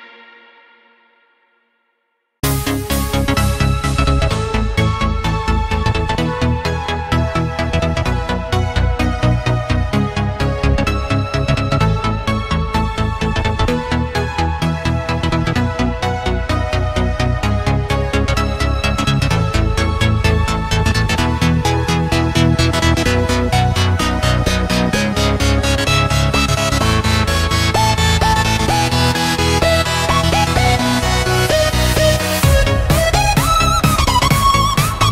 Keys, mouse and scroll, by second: 0.0-0.8 typing, 1.5-3.6 drag, 5.0 click, 5.7-8.1 typing, 9.1 click, 10.9 F10, 11.5-17.9 drag, 21.2 Delete, 21.7 Delete, 21.8 Delete, 22.0 Delete, 22.4-24.2 typing, 25.0-29.0 drag, 29.0-30.8 typing, 31.5 click, 31.8 Delete, 32.4 click, 32.5-34.3 typing, 34.3 Down, 34.6 Return.